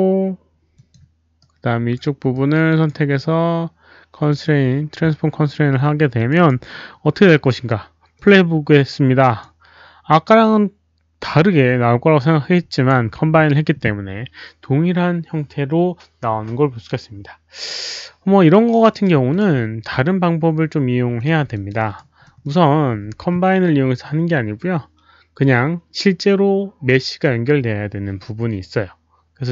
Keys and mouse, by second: 0.7 click, 1.4 right click, 2.3 click, 4.2 click, 6.1 click, 6.3 click, 8.1 click, 9.2 click, 9.2 right click, 12.7 click, 19.2 click, 20.1 click, 21.1 click, 21.5 alt+click, 21.7 alt+right drag, 22.2 alt+middle drag, 22.4 alt+click.